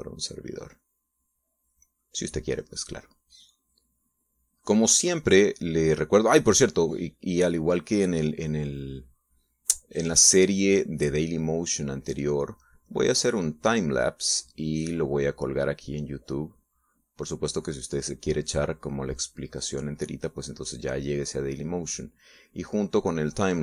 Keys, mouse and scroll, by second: 1.2-3.3 drag, 3.4-5.0 drag, 7.1 click, 7.5-9.4 drag, 11.3-13.6 drag, 13.7-23.6 drag.